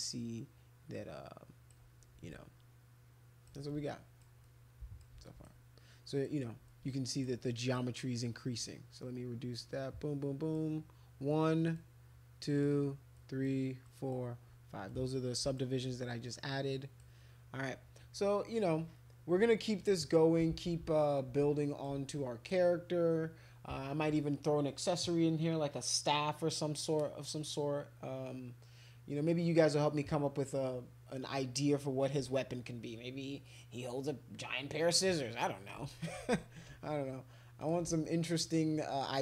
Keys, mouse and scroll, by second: 2.3-3.5 drag, 3.7 alt+click, 4.4 click, 5.3 alt+click, 6.2 click, 6.7 alt+click, 7.5 click, 9.6 click, 11.3 click, 12.4 click, 13.2 click, 13.9 click, 14.9 click, 16.7 click, 19.8 alt+click, 20.5 ctrl+z, 21.1 alt+click, 22.1 alt+click, 37.6 click, 38.0 alt+click.